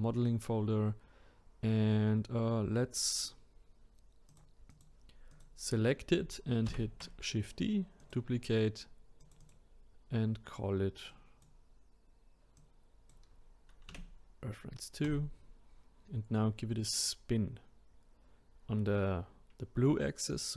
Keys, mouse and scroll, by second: 4.3 click, 4.7 click, 6.7 shift+d, 9.2 click, 9.4-12.5 drag.